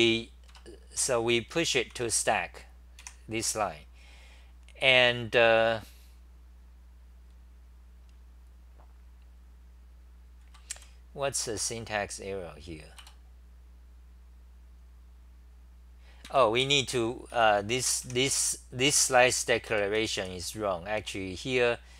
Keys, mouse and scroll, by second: 0.0-0.5 typing, 0.5 Tab, 1.9 ctrl+c, 3.1 2, 10.4 ctrl+g, 11.1-11.8 typing, 13.0 Return, 16.3 ctrl+g, 16.6 3, 17.8-18.5 typing, 19.7 ctrl+g, 20.2 g, 20.5 g, 21.0 p.